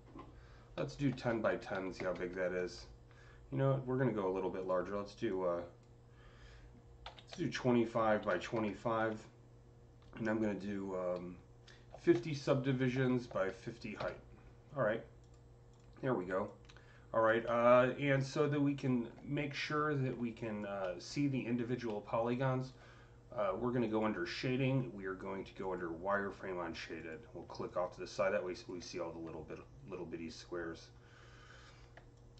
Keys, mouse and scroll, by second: 0.6 click, 0.6-1.9 typing, 1.3 Tab, 2.4 KP_Enter, 4.5 click, 5.1-7.7 drag, 6.9-8.9 typing, 7.7 Tab, 8.4 KP_Enter, 8.8 Tab, 8.9 KP_Enter, 11.8 Tab, 11.8 KP_Enter, 11.8-13.9 typing, 12.5 Tab, 13.9 KP_Enter, 15.1 click, 15.5 click, 16.3-21.3 alt+drag, 17.3-20.7 alt+middle drag, 17.5 typing, 21.7 alt+middle click, 22.2-25.5 alt+drag, 25.5-26.9 alt+drag, 27.5-29.8 drag, 29.4-29.7 scroll down 2, 29.8-30.6 scroll up 4, 32.0-32.3 alt+drag.